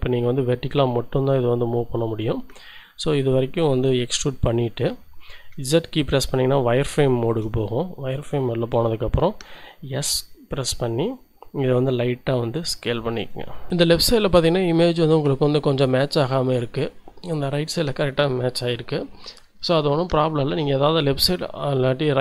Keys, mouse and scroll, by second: 4.1 click, 4.5 z, 4.9 shift+click, 5.4 shift+middle click, 7.0 shift+middle click, 7.6-8.1 shift+scroll up 1, 9.6 s, 13.1 click, 13.5 scroll down 1.